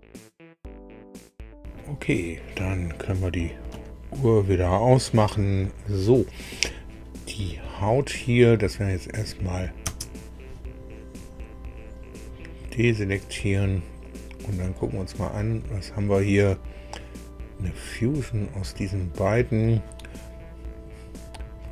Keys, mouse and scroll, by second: 1.6 middle click, 7.6-7.9 scroll down 2, 9.2 click, 9.8 space, 11.2-11.6 scroll up 2, 12.1 scroll down 2, 14.0 click, 14.7 click.